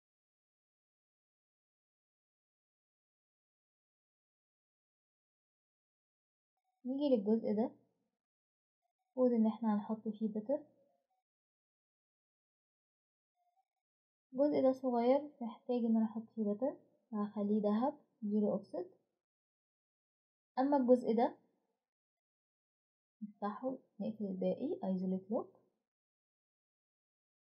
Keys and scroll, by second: 13.6 typing, 15.4 typing.